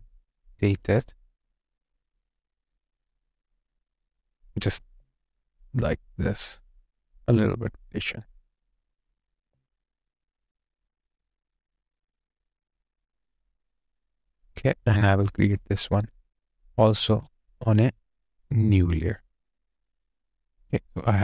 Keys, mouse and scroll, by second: 4.8 alt+click, 6.3 alt+click, 9.3 alt+click, 17.3 space, 21.0 double click.